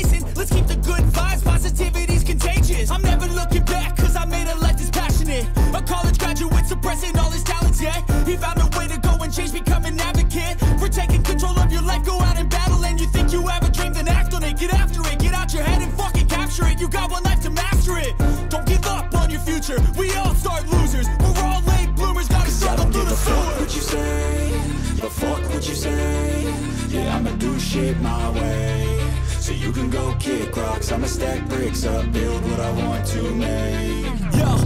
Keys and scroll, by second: 2.2 ], 5.9 ], 7.1 ], 12.3 ctrl+=, 18.3 ctrl+=, 19.6 ctrl+-, 19.7 space, 24.4 ctrl+=, 25.2 ctrl+=, 25.5 ], 27.6 space, 28.7 ], 29.7 ctrl+-, 33.9 ctrl+-.